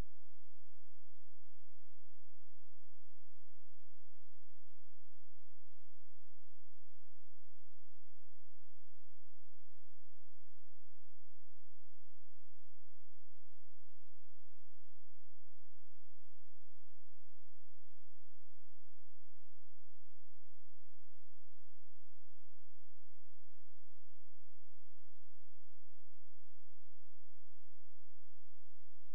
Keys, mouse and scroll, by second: 0.1-0.9 scroll up 1, 0.9 scroll down 1, 1.3 scroll up 1, 1.7 scroll down 1, 2.6 scroll up 1, 4.5 click, 5.3 shift+click, 6.6 shift+click, 9.3-10.1 scroll down 1, 10.1 click, 11.9 click, 12.3 shift+click, 13.3 shift+click, 16.3-16.7 scroll up 1, 16.7-17.1 scroll down 1, 17.3 ctrl+z, 19.1 click, 19.9-20.5 scroll up 1, 20.5-20.9 scroll down 1, 20.9-21.7 scroll up 1, 21.7-22.3 scroll down 1, 22.3-24.1 scroll up 1, 24.9 click, 28.1 [.